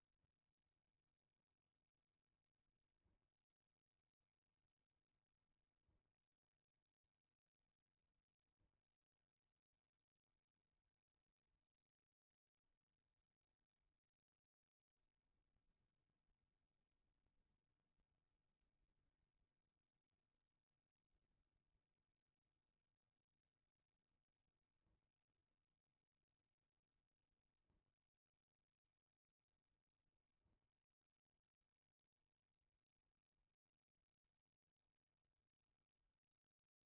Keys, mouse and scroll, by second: 0.7-1.0 middle drag, 1.5 click, 1.9 middle click, 5.7 click, 6.4-7.1 drag, 7.8 click, 12.7 click, 14.5 click, 15.6 click, 23.0 click, 25.7 click, 26.1 click, 27.3-28.3 middle drag, 30.0-30.6 shift+middle drag, 31.1-32.0 middle drag, 32.2 middle click, 32.4-33.4 middle drag, 33.9-34.3 shift+middle drag, 35.2 click.